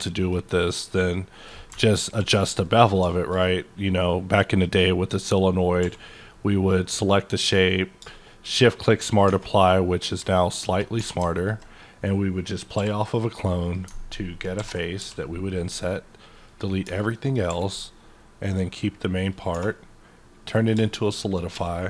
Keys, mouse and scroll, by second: 3.4-8.4 middle drag, 5.8 q, 8.4 shift+click, 8.9 shift+middle click, 9.2 scroll up 1, 9.4 Tab, 10.4 alt+click, 11.0 3, 12.7 i, 14.5 ctrl+i, 15.0 x, 16.3 click, 16.8 Tab, 17.1 middle click, 17.5 q, 19.3 click, 19.5 2, 20.5 click.